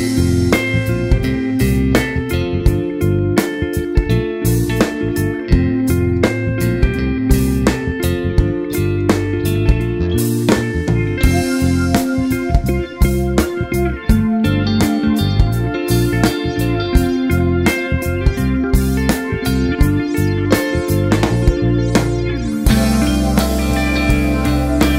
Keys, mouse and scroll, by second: 0.0 click, 0.5 click, 1.9 ctrl+r, 3.7 click, 3.8 ctrl+r, 4.4 Tab, 4.5 scroll down 1, 4.8 alt+a, 5.0 scroll down 1, 5.2 `, 5.6 click, 5.7 `, 6.5 scroll up 1, 6.8 `, 7.2 s, 8.5 scroll down 1, 8.6 alt+a, 8.8 `, 9.4 scroll down 1, 9.5 `, 10.7 KP_Decimal, 12.5 Tab, 12.8 click, 13.2 g, 13.8 KP_7, 15.0 g, 15.6 Tab, 15.8 `, 16.2 click, 16.5 Tab, 16.8 alt+click, 17.1-19.8 typing, 17.5-17.9 scroll down 1, 21.1 click, 21.6 g, 23.7 ctrl+r, 24.0 right click, 24.2 s, 24.8 Tab.